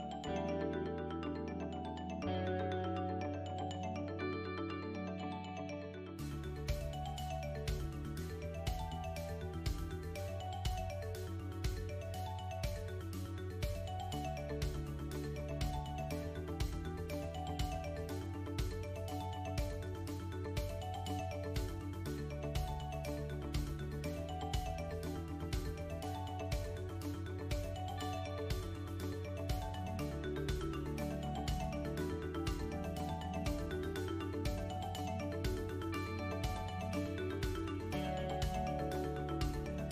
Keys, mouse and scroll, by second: 0.7 middle click, 1.5-2.0 scroll up 3, 2.0 shift+middle click, 2.5 middle click, 3.5 click, 5.3 KP_1, 6.5 shift+d, 8.3-8.7 scroll down 5, 9.7 s, 13.9 KP_7, 15.8 click, 17.8 ctrl+r, 19.7 ctrl+r, 21.9 alt+click, 22.8 click, 24.1 alt+click, 25.0 click, 27.9 alt+click, 28.7 click, 31.4 alt+click, 31.9 alt+click, 32.8 click, 36.3 a, 36.4 ctrl+click, 37.1 middle click, 37.8 ctrl+click, 38.3 middle click.